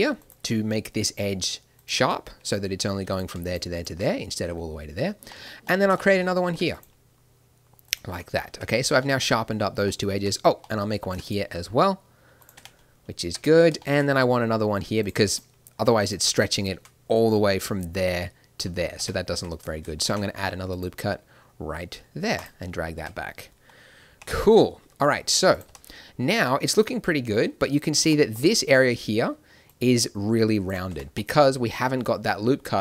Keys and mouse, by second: 1.7 click, 3.1-5.4 drag, 5.4 middle click, 6.4 ctrl+r, 7.8 middle click, 8.5 Tab, 10.1 Tab, 11.0 ctrl+r, 12.5 Tab, 13.2 Tab, 15.0-16.4 right drag, 17.7 d, 18.6 d, 18.9 Tab, 19.3 Tab, 20.0 ctrl+r, 22.9 Tab, 24.0 n, 25.7 n, 29.5 d, 29.6-30.6 drag, 30.6 d, 30.9 Tab, 30.9 d, 32.7 click.